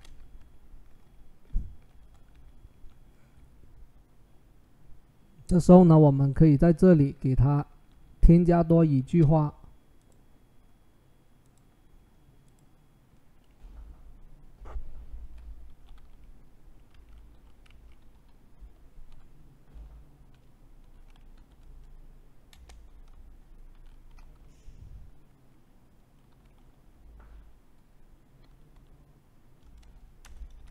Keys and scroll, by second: 15.4-21.1 typing, 23.3-24.0 typing, 25.8-26.6 typing, 27.9-28.7 typing, 30.3 ..